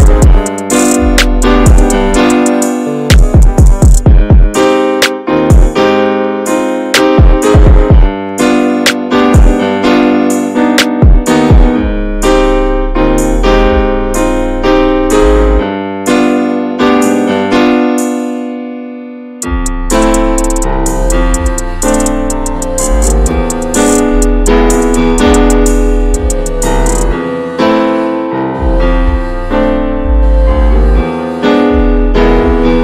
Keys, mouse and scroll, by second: 0.3 ctrl+s, 2.3 click, 2.5-3.5 middle drag, 3.5 click, 3.6 Tab, 6.3 Tab, 6.4-6.7 scroll up 1, 6.8 click, 7.2 scroll down 2, 7.9 click, 8.3-9.1 middle drag, 9.1 click, 10.1-13.9 right drag, 13.9 click, 15.2 click, 15.4 shift+h, 16.0-17.4 middle drag, 17.4 click, 18.0 scroll down 1, 18.2-21.7 shift+middle drag, 21.7-25.8 drag, 25.8-32.8 alt+middle drag.